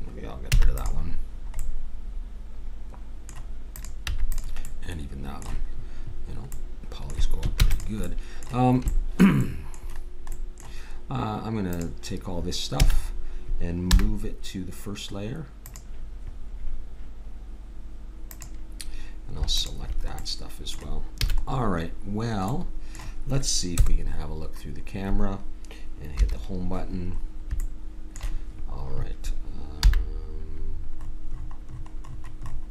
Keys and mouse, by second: 0.5 x, 1.4-2.4 middle drag, 3.8 click, 4.7-5.7 middle drag, 7.6 ctrl+s, 11.7-13.5 drag, 12.8 a, 13.9 m, 18.2-21.4 drag, 21.3 a, 23.7 KP_0, 26.2 Home, 29.8 n.